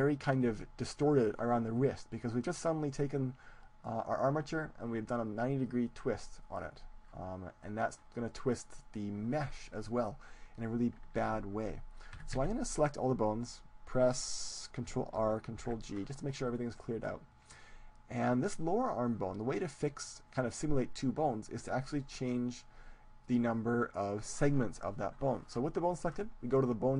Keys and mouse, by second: 11.3 ctrl+z, 12.1 a, 12.3 a, 15.1 alt+r, 15.5 alt+g, 16.5 middle click, 17.6-20.1 middle drag, 23.3-25.1 drag.